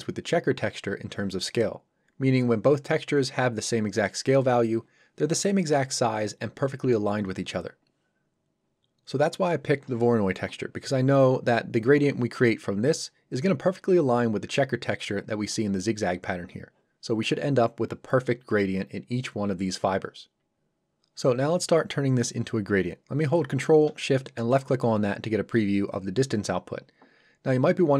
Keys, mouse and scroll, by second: 24.4 ctrl+shift+click.